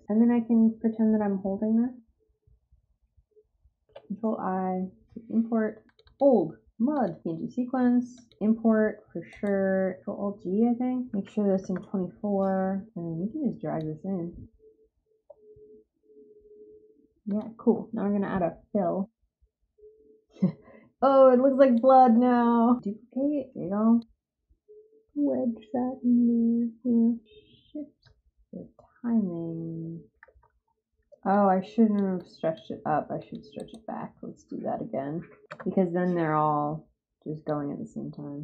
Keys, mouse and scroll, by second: 3.8 ctrl+i, 5.8 click, 6.0 click, 6.9 click, 8.1 click, 9.2 right click, 12.8 click, 17.2 click, 21.2 click, 21.9 space, 25.2 Up, 28.0 click, 31.3 click, 32.1 click, 33.1 click, 33.5 right click, 37.4 click.